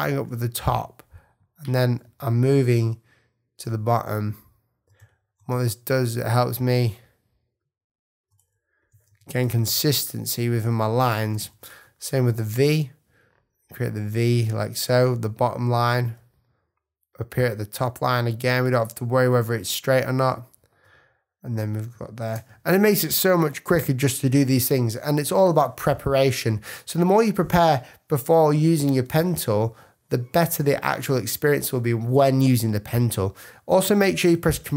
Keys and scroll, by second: 34.3 super+=.